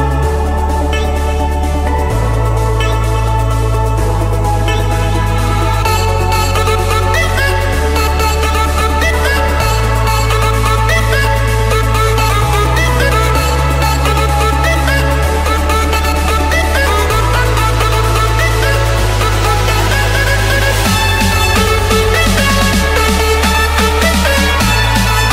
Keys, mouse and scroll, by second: 0.0-0.2 typing, 0.7 Return, 2.4-7.8 middle drag, 2.4-3.0 scroll, 3.3-4.1 scroll, 4.1-5.5 scroll, 5.5-7.3 scroll, 8.3-9.7 typing, 10.2 Return, 11.6 typing, 12.4 Return, 15.5-16.6 drag, 17.2-18.3 drag, 19.2 click, 20.2 Escape, 23.0 click, 24.6 click.